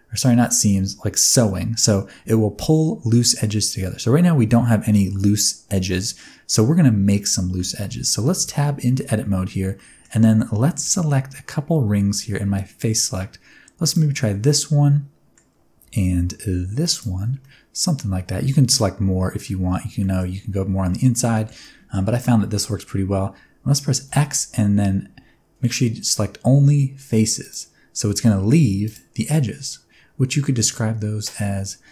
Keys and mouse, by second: 7.8 middle click, 8.2 Tab, 9.7 middle click, 10.8 3, 13.8 alt+click, 14.4 middle click, 16.8 alt+shift+click, 17.4-19.4 middle drag, 20.0 middle click, 20.8 middle click, 21.3 shift+middle click, 21.6 middle click, 22.1 shift+middle click, 22.4 middle click, 24.0 x, 28.5 2, 29.1-31.9 middle drag.